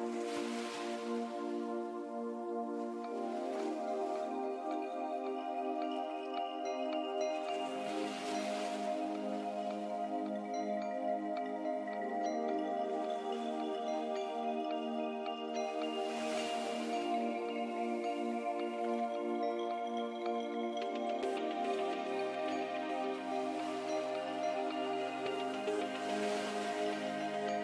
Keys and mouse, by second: 5.1 middle click, 5.6 click, 5.9-6.9 middle drag, 6.9 Tab, 9.5 KP_1, 9.8 Tab, 10.6 x, 11.3 shift+a, 14.5-16.8 drag, 15.8 z, 16.8 Tab, 17.4 w, 20.3-21.4 drag, 20.9 x, 21.9 a, 22.8-24.8 drag, 24.8-27.6 middle drag.